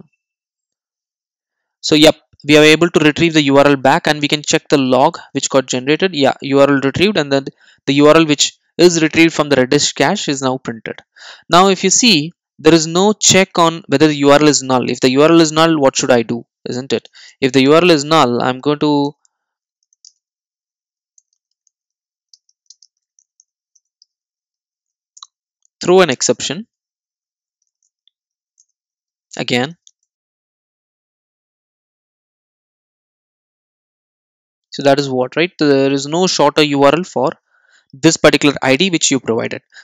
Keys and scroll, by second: 19.1 Return, 28.6 Return, 36.3 super+s.